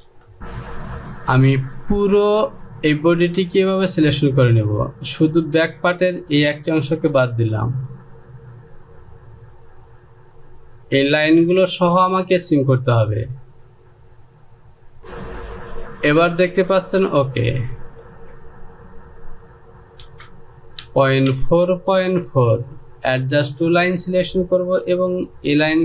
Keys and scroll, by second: 15.0 j, 21.3-21.8 typing.